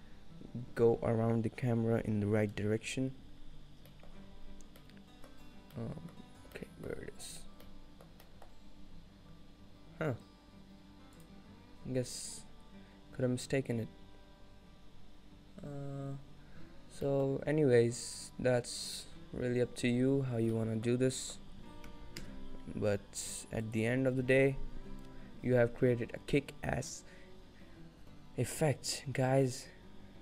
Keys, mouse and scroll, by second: 6.2 middle click, 6.2 scroll down 3, 7.0-7.7 scroll down 13, 7.7 middle click, 8.3 middle click, 8.8 scroll down 1, 11.2 click, 20.0-20.6 scroll down 1, 20.6 middle click, 21.1 scroll down 1, 21.3 shift+middle click, 22.3 KP_0, 23.7 click.